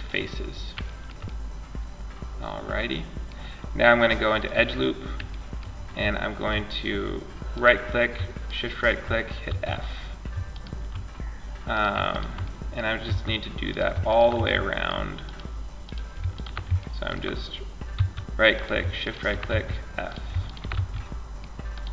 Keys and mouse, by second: 3.6-5.6 drag, 5.6-6.8 middle drag, 6.8 right click, 7.1-8.7 right drag, 8.7 f, 9.7 middle click, 9.8 right click, 11.0 right click, 12.3 f, 12.9 right click, 13.6 f, 13.8 middle click, 14.0 middle click, 14.5-15.6 right drag, 15.7 right click, 16.2-17.2 middle drag, 17.2 f, 17.8 right click, 18.8 f, 19.2 right click, 20.0 f, 21.0 right click, 21.7 f.